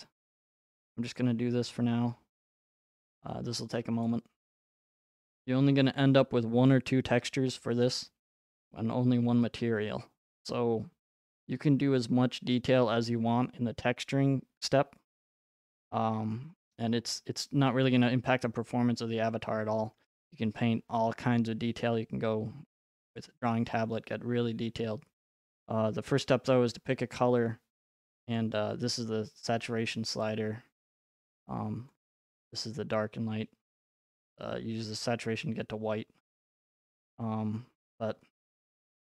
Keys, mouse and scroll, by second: 0.5 click, 1.2 click, 16.5-19.4 scroll, 20.0 right click, 26.9 click, 28.4 click, 31.4 click, 34.2 click, 36.8 click.